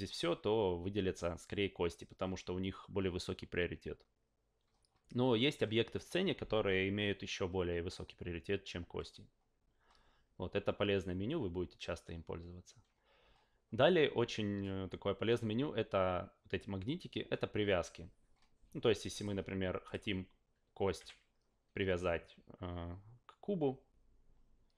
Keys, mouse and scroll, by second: 0.0 click, 19.1 drag, 19.8 click, 21.0 w.